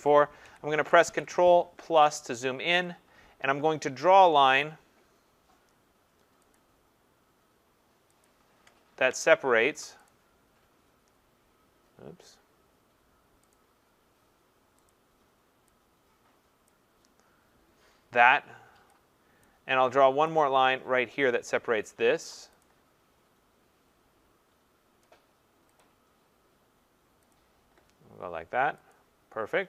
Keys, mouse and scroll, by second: 0.4 ctrl+=, 0.8 ctrl+=, 1.1 ctrl+=, 1.8 scroll, 2.3-3.7 scroll, 2.8 click, 6.6 click, 8.2 click, 10.1 click, 13.5 click, 14.9 click, 16.7 click, 19.3 click, 19.5 click, 19.5-20.0 click, 20.1 click, 20.3 click, 21.0 click, 22.6 click, 25.8 click, 27.3 click, 28.9 click.